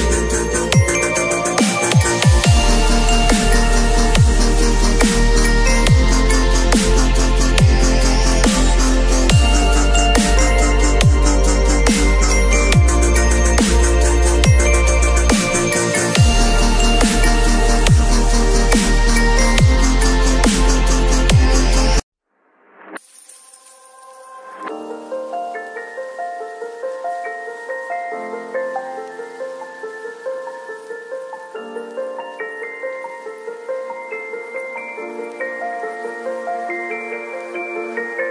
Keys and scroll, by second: 6.1 [, 11.2 ], 17.8 x, 18.3 [, 21.2 v, 22.0 x, 22.4 [, 24.1 0, 32.3 v, 33.1 space, 37.7 ctrl+z.